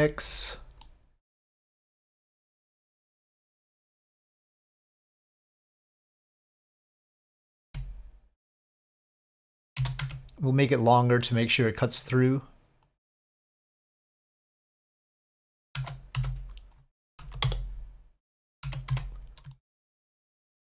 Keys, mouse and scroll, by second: 0.8 middle click, 2.2 click, 3.2 click, 4.3-7.4 drag, 7.6 s, 9.8 s, 11.3 middle click, 12.9 click, 13.8 click, 14.5-15.2 middle drag, 15.7 z, 17.2 KP_5, 17.4 KP_7, 18.6 z, 19.5-19.9 shift+middle drag.